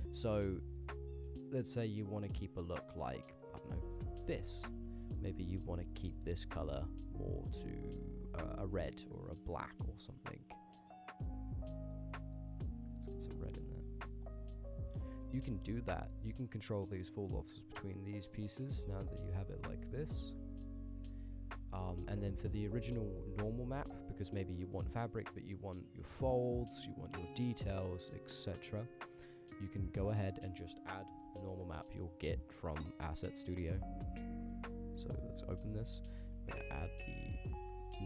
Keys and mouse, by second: 4.9 middle click, 5.4 middle click, 6.0 click, 9.5 click, 15.0 middle click, 15.7-16.6 drag, 17.1-20.6 drag, 21.2 middle click, 21.7 click, 21.9 g, 22.9-23.2 middle drag, 23.8 KP_Decimal, 24.7 middle drag, 26.1-26.5 middle drag, 26.9 ctrl+middle click, 27.2 middle drag, 27.7 click, 28.0 click, 28.3 ctrl+click, 29.3 middle click, 30.2 click, 30.4 click, 31.2 ctrl+c, 31.4 ctrl+v, 32.0-33.5 drag, 33.8 click, 34.6 click, 37.3 click, 37.9 middle click.